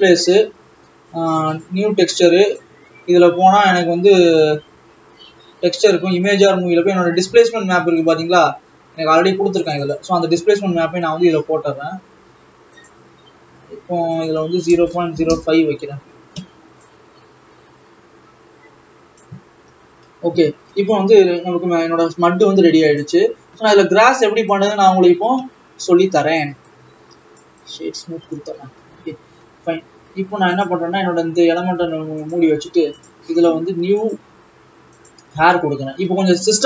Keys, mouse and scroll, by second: 2.7-9.8 drag, 9.8-11.2 drag, 15.4 KP_0, 17.0-19.9 drag, 19.9 scroll up 4, 21.2 scroll down 3, 22.4 scroll up 1, 23.2 click, 24.7 click, 25.5-27.0 scroll up 5, 27.7 right click, 28.4-29.4 scroll down 1, 32.7 click, 35.3-36.6 drag.